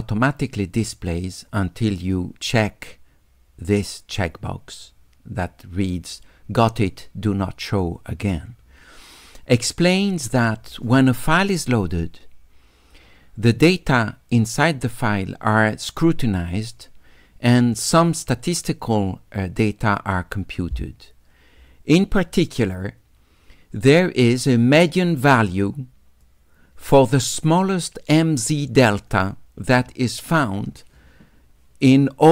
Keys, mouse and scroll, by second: 25.0 click, 26.2-28.2 drag.